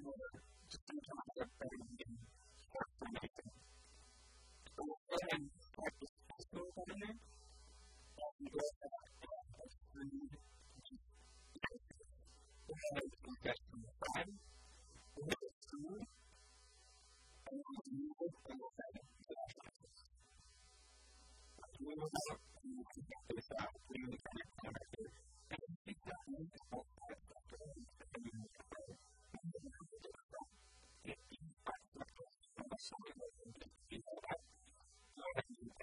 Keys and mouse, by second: 1.9 a, 2.5 click, 2.7 click, 7.1-8.4 middle drag, 8.7 KP_1, 9.0 KP_3, 12.1 KP_1, 15.0 e, 16.4-18.2 drag, 17.4 g, 18.4-21.7 drag, 18.6 r, 22.1-26.1 middle drag, 26.1-27.8 drag, 26.3-28.2 typing, 30.0 b, 31.3 x, 33.3-35.5 drag.